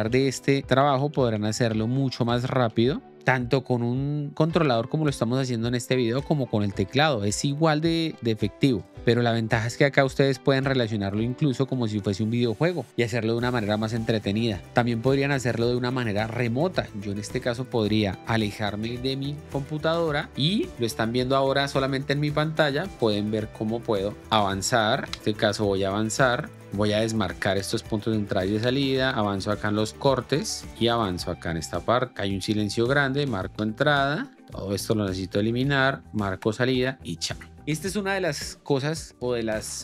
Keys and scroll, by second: 0.1 Right, 2.1 l, 2.6 Left, 3.1 o, 7.1 Delete, 8.0 l, 8.6 k, 9.0 l, 10.1 k, 10.6 Left, 11.7 o, 12.1 Delete, 24.6 o, 25.0 l, 26.5 k, 27.6 h, 28.5 Down, 29.3 Down, 30.4 Up, 30.7 l, 32.3 k, 33.1 i, 33.5 l, 35.8 k, 36.4 o, 36.8 Delete.